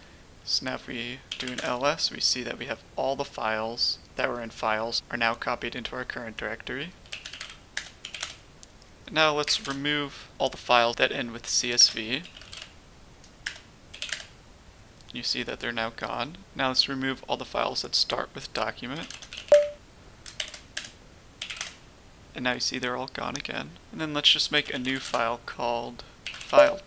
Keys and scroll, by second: 1.2 typing, 1.5 Return, 7.0-8.1 typing, 9.4 typing, 11.7-12.4 typing, 13.4 Return, 13.6-15.3 typing.